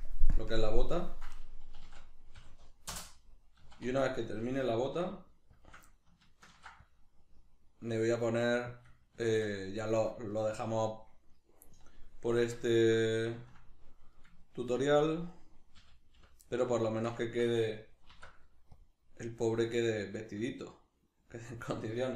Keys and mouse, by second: 0.4 ctrl+KP_Subtract, 1.8 s, 5.6 shift+click, 6.5 ctrl+r, 8.8 click, 9.2-15.3 shift+middle drag, 15.3 right click, 15.8 l, 16.5-22.1 middle drag, 18.1 alt+e, 21.7 click.